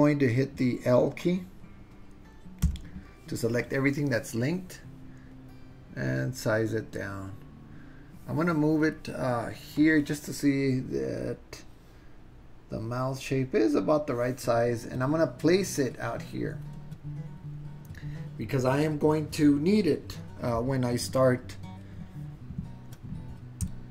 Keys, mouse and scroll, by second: 2.7 l, 5.3 super+z, 5.3-7.4 drag, 8.9 click, 9.8-16.7 drag.